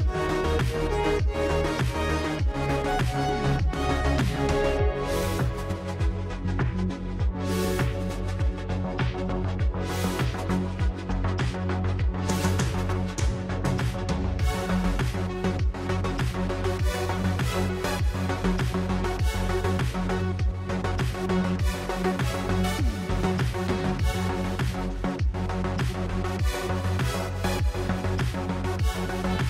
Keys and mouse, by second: 0.6-1.4 drag, 1.8 click, 2.7 click, 4.3 click, 6.6-7.8 drag, 8.2 click, 19.7 f, 19.9 f, 20.1 f, 23.1 click, 24.0 click, 24.5-25.8 drag, 26.0 click, 26.3 click, 27.7 click.